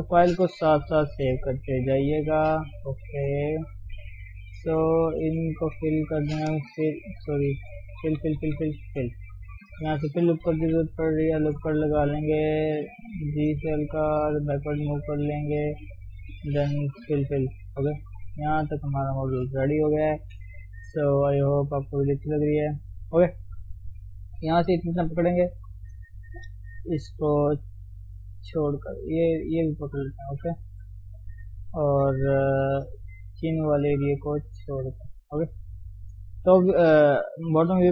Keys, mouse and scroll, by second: 0.0 ctrl+Tab, 1.0 ctrl+shift+s, 2.3 ctrl+shift+s, 2.7 scroll up 2, 3.0 shift+middle click, 3.3 Tab, 3.5 middle click, 4.1-5.1 scroll up 1, 5.1 click, 5.9 middle click, 6.3-8.0 scroll down 1, 8.0-8.3 f, 8.5 f, 8.9 f, 9.2-10.5 middle drag, 10.5 ctrl+r, 11.4 KP_3, 11.9-12.6 scroll up 2, 13.1 g, 16.1 Left, 17.1 f, 17.3 f, 17.7 scroll down 1, 18.0-19.3 middle drag, 19.3-19.9 scroll up 1, 19.9 KP_3, 20.2-20.6 scroll down 1, 20.6 shift+middle click, 20.8 scroll up 2, 21.0 Tab, 21.5 shift+middle click, 21.8 scroll down 1, 22.0 shift+middle click, 22.1-23.0 scroll up 2, 23.0 shift+middle click, 23.3 scroll down 1, 23.7 click, 24.2 alt+shift+click, 24.3 scroll down 1, 24.6 middle click, 25.5 KP_3, 25.7-26.1 scroll up 1, 26.1 shift+z, 28.4 ctrl+click, 29.6 ctrl+click, 30.0 shift+click, 30.1 scroll down 2, 30.4 shift+z, 30.6-33.6 middle drag, 33.6 ctrl+click, 33.8-36.0 middle drag, 36.0 ctrl+KP_7, 36.3 scroll up 1, 36.8-37.9 shift+middle drag.